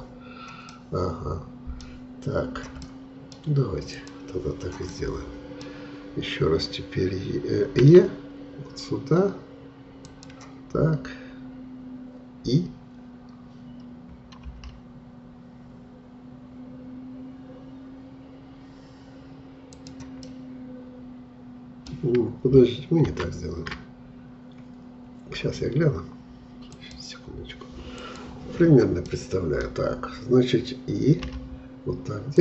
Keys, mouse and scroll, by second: 0.7-3.9 middle drag, 3.9-4.9 drag, 4.9-7.8 middle drag, 7.8 e, 20.3-23.1 middle drag, 23.1 ctrl+z, 29.1-31.2 middle drag, 31.2 typing.